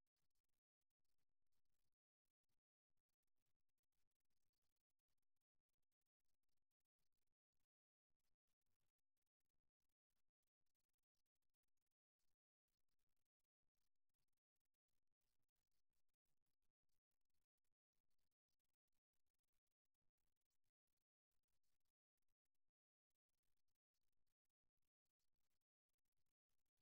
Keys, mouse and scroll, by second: 0.0-2.8 right drag, 2.2 g, 9.6-11.4 right drag, 12.4 f, 13.5-18.0 right drag, 13.8 f, 15.6 f, 16.4 f, 18.6-20.3 middle drag, 24.2 middle click, 25.4-26.8 right drag.